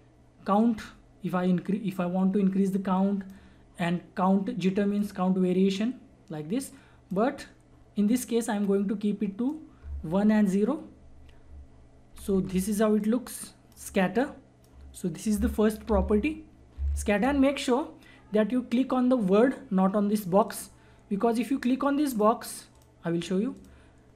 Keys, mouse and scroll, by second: 12.1 [, 12.3 [, 12.4 [, 13.0-15.8 drag, 15.8 ctrl+z, 20.4 click.